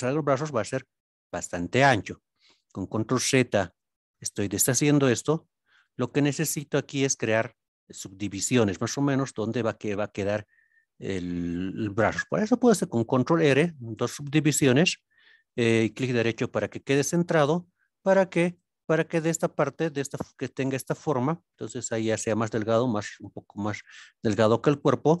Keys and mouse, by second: 0.0-0.6 middle drag, 2.7 ctrl+z, 3.6 g, 4.1 click, 9.1-9.6 middle drag, 12.5 ctrl+r, 15.9 right click, 18.4 right click, 19.4-19.9 middle drag.